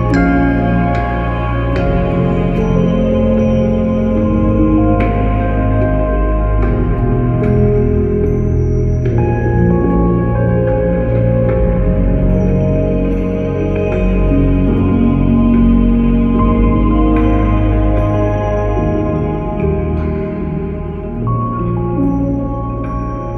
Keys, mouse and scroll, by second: 0.0-3.7 typing, 4.5 click, 20.9 click, 22.0-22.7 typing.